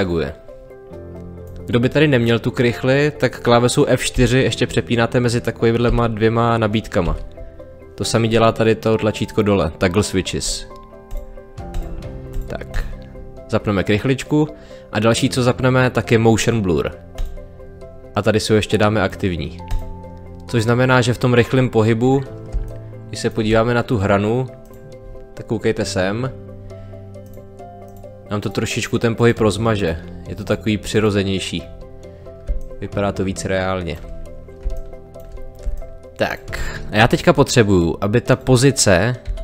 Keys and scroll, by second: 4.1 F4, 22.5 space, 32.5 space, 39.2 p.